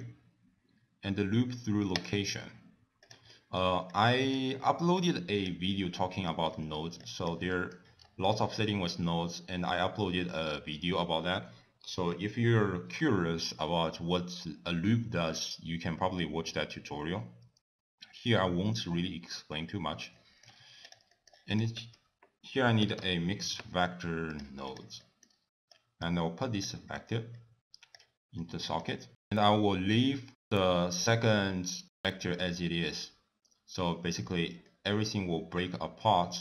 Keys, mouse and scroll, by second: 1.8 middle click, 2.3 click, 3.1 click, 3.7 middle click, 4.3-4.7 scroll down 3, 4.7 click, 5.1 middle click, 5.5 scroll up 3, 14.8 middle click, 15.1 scroll down 1, 15.3 click, 15.6 middle click, 15.8 click, 16.1 ctrl+a, 18.6 middle click, 18.8-19.2 scroll up 3, 19.2 click, 19.8 click, 21.2 middle click, 28.0 middle click.